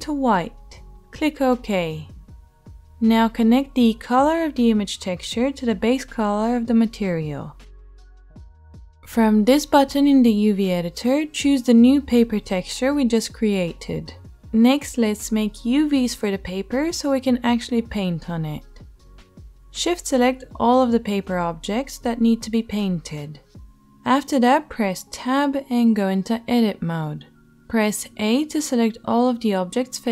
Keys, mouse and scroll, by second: 5.9-9.5 middle drag, 9.5-23.0 right drag, 11.5-23.0 drag, 11.5-23.6 middle drag, 23.1 click, 23.1 right click, 24.4 Tab, 28.8 a.